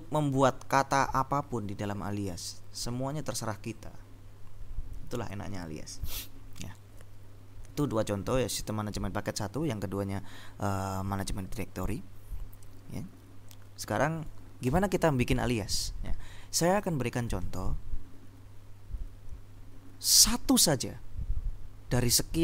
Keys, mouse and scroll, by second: 14.8 ctrl+l.